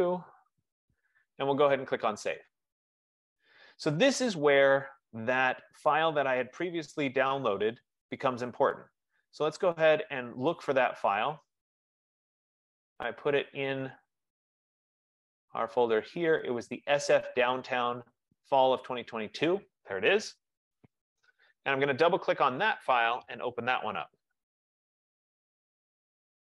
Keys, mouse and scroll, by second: 0.0-0.5 typing, 2.8 click, 6.4 click, 9.9 click, 11.9 click, 12.5 F15, 13.8 click, 15.3 click, 15.5 click, 19.1 click, 19.3 click.